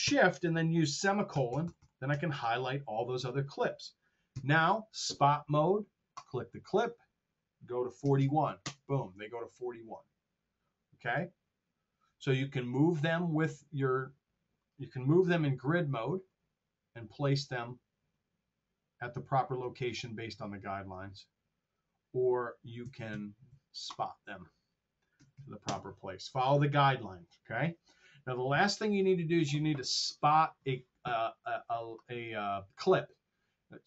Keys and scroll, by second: 1.1 shift+;, 4.3 Delete, 7.9 KP_4, 8.1 KP_1, 8.6 Return, 25.1 KP_4, 25.2 KP_1, 25.5 Return.